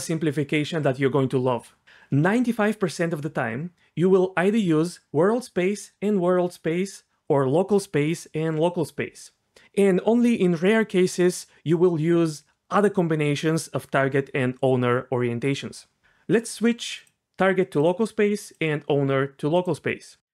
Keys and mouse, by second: 17.0-17.9 drag, 18.6-19.6 drag.